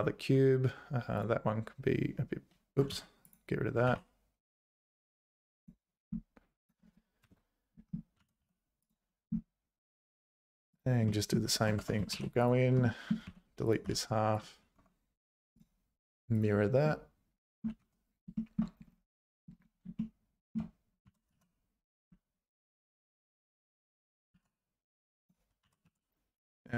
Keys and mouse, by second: 2.9 x, 3.9 shift+a, 6.7 click, 8.2 g, 11.3 click, 11.8 Tab, 12.1 ctrl+r, 13.0 middle click, 13.3 3, 13.7 click, 13.8 x, 14.8 Tab, 15.7 click, 16.8 middle click, 18.3 shift+click, 20.0 shift+click, 20.2 middle click, 21.0 g, 24.0 Tab, 24.3 z, 24.8 1, 25.2 click, 25.6 g.